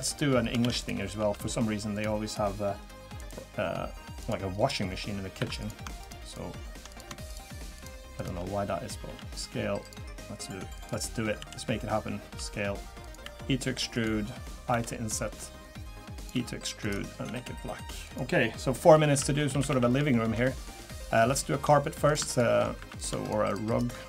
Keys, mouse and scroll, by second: 0.0 click, 0.6 shift+d, 1.2 s, 3.2 right click, 4.5 scroll up 2, 4.9 scroll down 1, 5.4 2, 5.6 click, 6.0 shift+click, 6.9 click, 7.3 shift+click, 9.0 s, 10.7 click, 11.4 l, 12.3 s, 13.2 e, 14.7 i, 16.3 e, 17.2 g, 18.6-19.1 scroll down 5, 19.1 a, 19.4-20.1 scroll down 5, 19.5 a, 19.7 a, 20.1 shift+middle click, 20.4 middle click, 20.7-21.1 scroll up 3, 21.3 shift+middle click, 21.7 scroll down 2, 22.1 click, 22.3 shift+click, 22.8 3, 23.0 click, 23.2 shift+click.